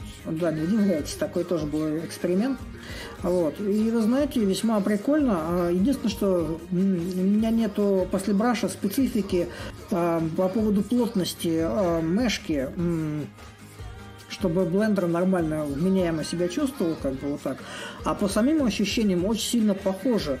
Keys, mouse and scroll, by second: 4.1-9.1 drag, 9.3-14.3 drag, 16.9-20.4 drag.